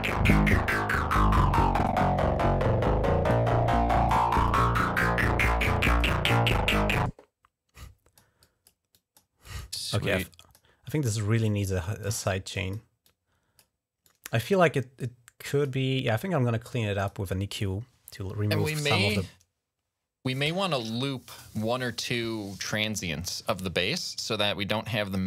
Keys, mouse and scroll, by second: 2.2 click, 3.7 click, 4.3-5.8 drag, 5.8 right click, 7.7 click, 8.1 right click, 8.2 click, 8.5 right click, 8.8 click, 9.0 right click, 9.3 click, 9.9 click, 10.7 click, 11.6 click, 12.4 click, 12.9 click, 13.9 click, 14.8 click, 16.9 click, 18.7 right click.